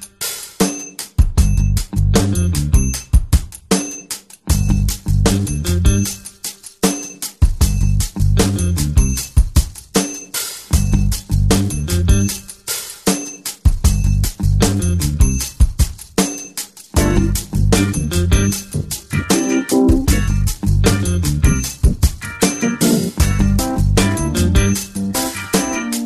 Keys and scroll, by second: 8.7 space, 10.2 s, 18.3 ctrl+alt+space, 25.0 ctrl+j.